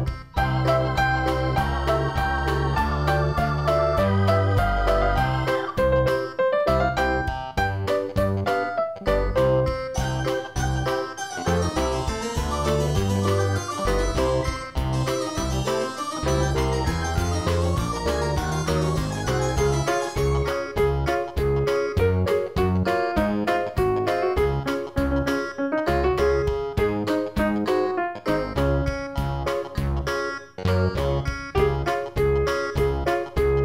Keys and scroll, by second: 0.5 ctrl+z, 15.9 ctrl+z, 23.0 ctrl+0, 23.4 ctrl+-, 24.4 ctrl+=, 24.9 ctrl+-, 26.0 ctrl+=, 31.0 ctrl+z.